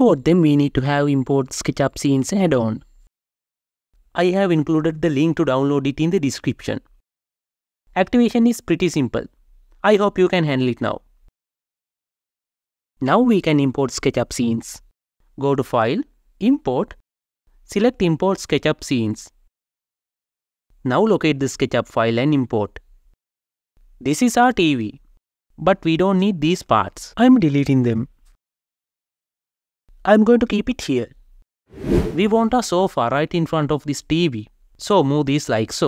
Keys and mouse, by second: 16.1-21.4 drag, 25.5 click, 27.8 Delete, 28.5 g, 28.6 z, 30.9 click, 32.0 g, 32.9 y.